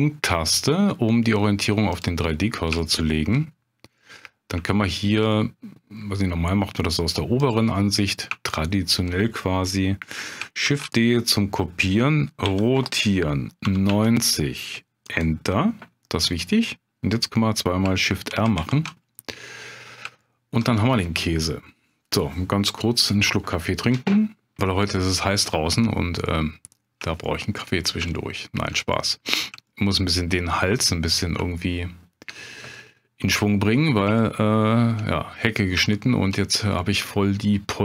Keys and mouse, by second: 2.9 shift+middle click, 4.0 middle click, 4.7 shift+middle click, 5.3 middle click, 7.4 click, 8.4 shift+middle click, 10.6 shift+d, 12.4 r, 13.6 9, 13.9 0, 15.0 click, 18.3 shift+r, 19.1 middle click, 20.2 shift+middle click, 26.2 middle click, 27.2 shift+middle click, 28.1 shift+middle click, 28.9 middle click, 29.7 shift+middle click, 30.8 middle click, 31.6 shift+middle click, 33.4 middle click, 34.2 shift+middle click, 35.9 shift+middle click, 36.8 middle click.